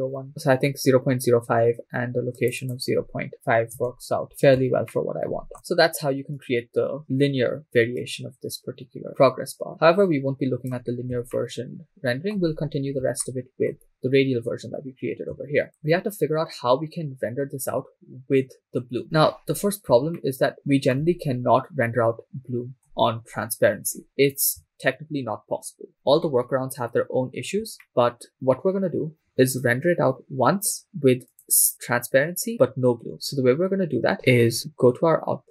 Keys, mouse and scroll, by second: 1.1 BackSpace, 2.4-3.8 drag, 3.3 BackSpace, 4.6-5.0 shift+scroll down 2, 5.0-6.4 shift+middle drag, 6.4-10.8 drag, 11.4-13.0 shift+middle drag, 13.1 shift+scroll up 1, 13.4 shift+middle click, 13.9 scroll up 1, 15.6 shift+scroll down 2, 15.6 shift+middle click, 17.0-19.4 drag, 19.4-19.9 scroll up 5, 20.3-21.2 shift+middle drag, 21.4-22.2 scroll up 1, 23.4-24.0 scroll down 2, 24.0-24.7 scroll down 3, 24.7 shift+middle click, 26.5-27.1 scroll up 3, 27.1-27.6 scroll down 3, 27.9 shift+middle click, 31.3 click, 35.3-35.5 scroll down 4.